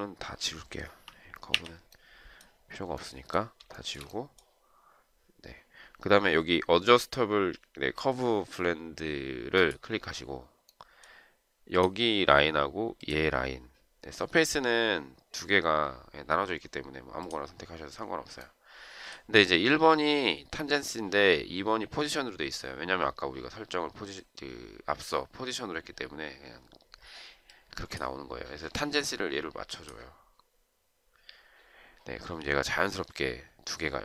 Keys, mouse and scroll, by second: 1.6 Delete, 3.8 shift+right click.